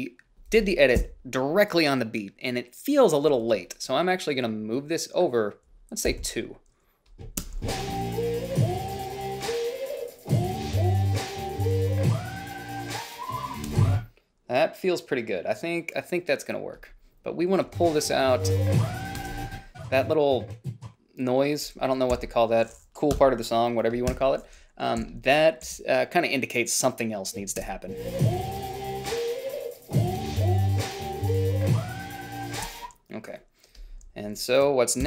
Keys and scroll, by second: 1.3 Down, 6.5 ,, 6.5 ,, 7.8 space, 14.0 space, 18.0 space, 19.5 space, 22.5 g, 23.5 Delete, 24.4 -, 25.3 h, 26.0 a, 27.9 space, 32.9 space.